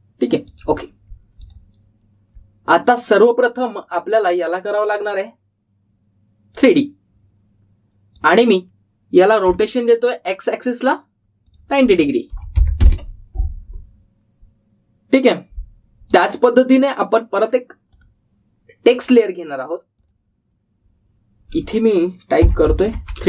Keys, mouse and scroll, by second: 3.2-5.0 scroll down 1, 5.0 click, 10.4 r, 12.4 click, 17.0 click, 18.8 right click, 19.8 click.